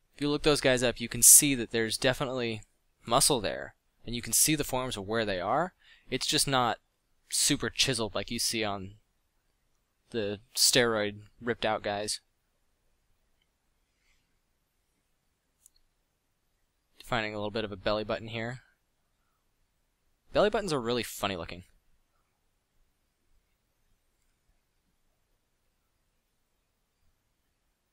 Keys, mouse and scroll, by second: 3.2 f, 5.8 middle drag, 6.1 f, 7.1 f, 7.6 f, 20.1 f, 23.9 f, 25.7 f.